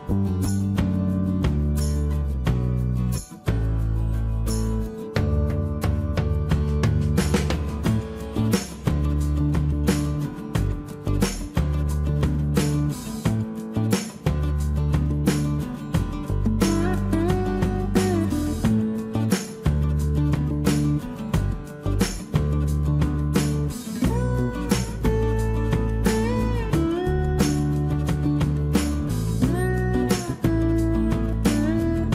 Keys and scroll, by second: 0.5 Escape, 5.7 space, 6.0 Delete, 7.0 Delete, 12.2 e, 12.6 space, 14.6 Escape, 23.2 Escape, 25.8 p, 26.6 Return, 27.2 space, 28.1 Escape.